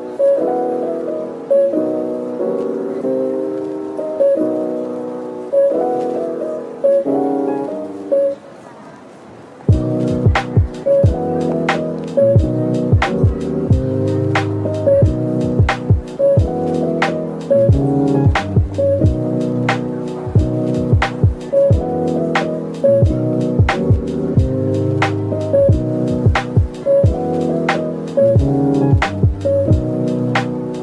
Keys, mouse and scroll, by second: 3.8 Tab, 5.5 shift+click, 6.8 ctrl+l, 8.9 ctrl+l, 10.6 scroll down 1, 11.0 middle click, 11.9-12.3 scroll up 1, 12.9 Tab, 13.2 scroll up 1, 16.1 double click, 17.1 middle click, 19.5 scroll up 1, 21.5 shift+click, 22.5 shift+click, 24.9 shift+click, 25.6 middle click, 26.9 shift+click, 27.3 middle click, 27.3 shift+click, 28.2-28.5 scroll down 1, 29.2 shift+click, 29.9 middle click.